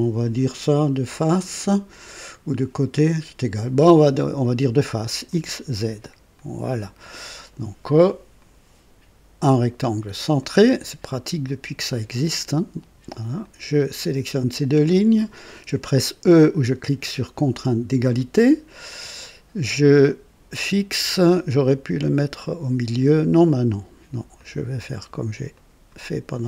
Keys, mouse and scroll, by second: 5.2 click, 6.3 click, 8.3 click, 10.3 click, 11.4 click, 11.9 right click, 13.4 click, 14.5 click, 17.9 e, 24.3 click, 25.5 click.